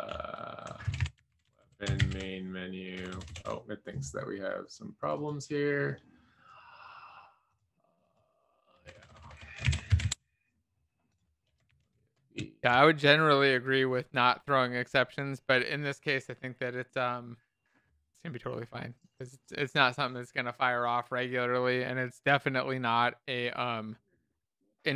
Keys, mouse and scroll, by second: 9.8 Escape, 10.0 Down, 12.0 alt+Caps_Lock.